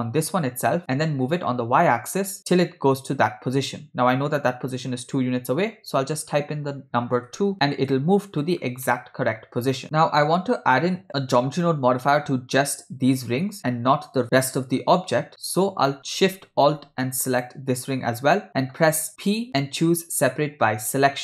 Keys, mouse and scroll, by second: 0.3 shift+d, 9.0 middle click, 17.3 alt+shift+click, 19.3 p.